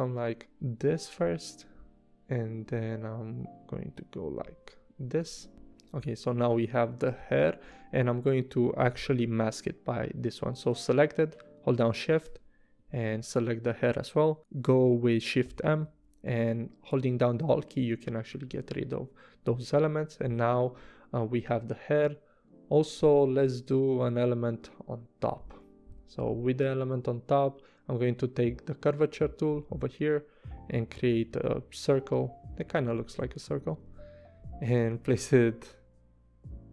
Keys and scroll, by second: 7.2 v, 15.4 shift+m, 18.5 v, 33.9 v.